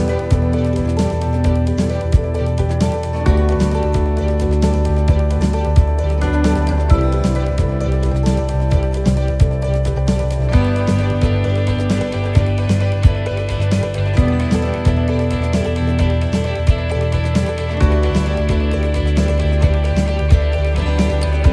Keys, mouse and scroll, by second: 5.3 click, 5.7 ctrl+z, 6.3 shift+middle click, 7.5 c, 10.3 middle click, 13.4 middle click, 13.4 shift+right click, 14.3 c, 18.8 middle click, 18.8 click.